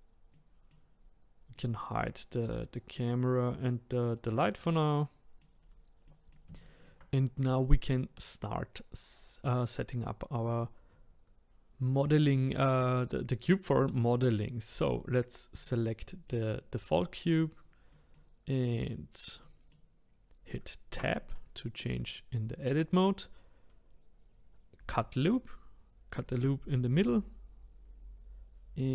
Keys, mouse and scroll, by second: 0.3 middle click, 0.9-1.5 scroll down 1, 1.5-3.1 middle drag, 3.1 click, 4.3 click, 5.0 middle click, 5.6 scroll up 4, 6.0-9.6 middle drag, 14.7 click, 15.5 click, 16.2-17.5 middle drag, 17.5 click, 17.9-21.0 middle drag, 21.0 Tab, 24.8-28.9 drag.